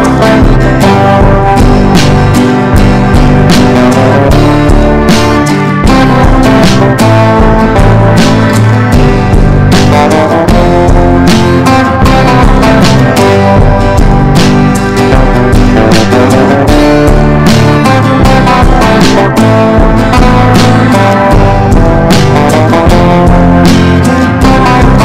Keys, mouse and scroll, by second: 0.0-1.4 typing, 2.5 click, 3.8-4.8 typing, 6.8 Return, 7.4-10.2 typing, 11.5-14.6 drag, 16.4 ctrl+b, 17.4 click.